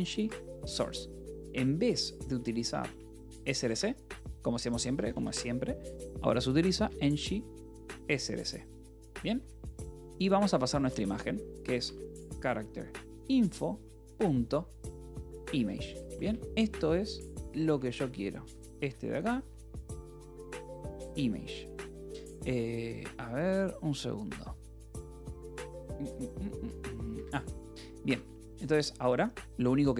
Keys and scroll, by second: 0.0-5.6 typing, 1.1 Escape, 6.6-22.2 typing, 13.5 ctrl+n, 24.6-28.2 typing, 27.0 Escape.